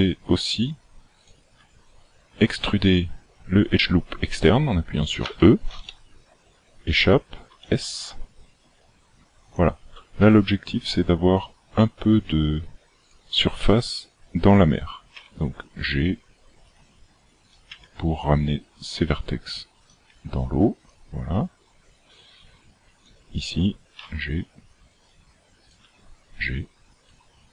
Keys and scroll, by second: 5.3 e, 7.5 s, 15.2 g, 17.7 g, 20.1 g, 24.0 g, 25.8 g.